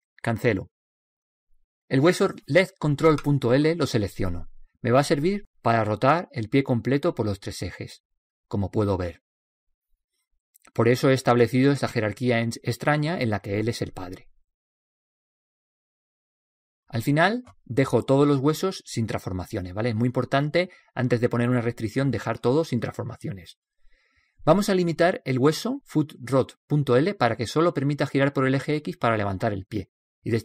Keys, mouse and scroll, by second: 1.2 ctrl+z, 4.5 right click, 6.5-7.8 right drag, 7.8-9.7 drag, 10.9-12.7 drag, 13.0-14.9 drag, 19.0 alt+r, 20.4 a, 20.8 a, 22.5 alt+r, 22.8 alt+g, 23.2 alt+s, 26.9-28.8 right drag.